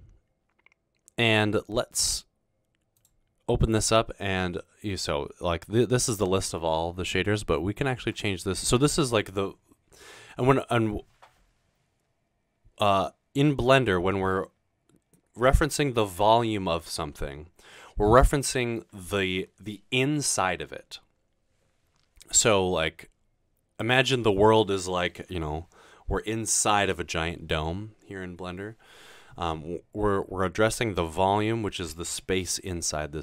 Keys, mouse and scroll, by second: 3.0 click.